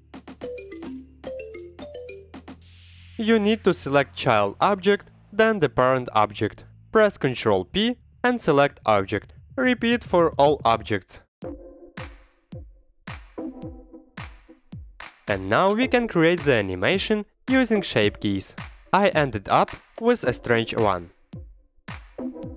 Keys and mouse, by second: 0.0 shift+click, 0.6 click, 2.6-3.1 drag, 3.2 shift+click, 4.1 ctrl+p, 7.2 shift+click, 7.9 ctrl+p, 14.1 shift+click, 14.8 ctrl+p, 16.7-19.7 typing, 17.4 Escape, 17.7 Escape, 18.3 Escape, 19.1 Escape, 20.0 Escape, 20.1-20.5 middle drag, 20.8-21.4 middle drag, 21.4-22.1 drag, 22.3 middle click.